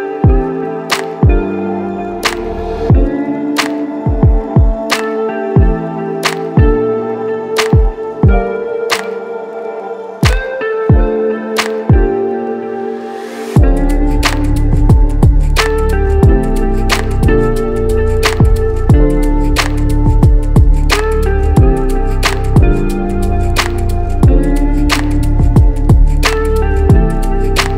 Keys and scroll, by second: 7.8 ctrl+c, 8.9 ctrl+v, 12.4 u, 26.0 Up, 26.2 Up, 26.5 Up, 27.2 Down, 27.4 Down, 27.5 Down, 27.7 Down.